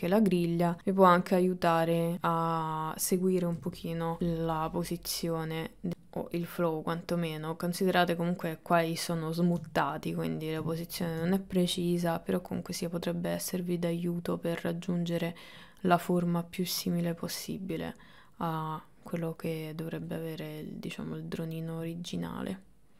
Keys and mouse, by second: 0.1 click, 0.4 click, 0.8 click, 1.2 click, 1.7 click, 2.1 click, 2.6 shift+middle click, 2.9 click, 3.1 middle click, 3.6 middle click, 4.0 KP_1, 4.5 click, 5.0 click, 5.5 click, 5.7 click, 6.5 click, 7.1 click, 9.8 shift+middle click, 10.9 ctrl+middle click, 12.5-13.6 drag, 14.4 click, 15.7 click, 16.3 click, 17.2 click, 18.0 click, 19.1 click, 20.3-22.9 middle drag.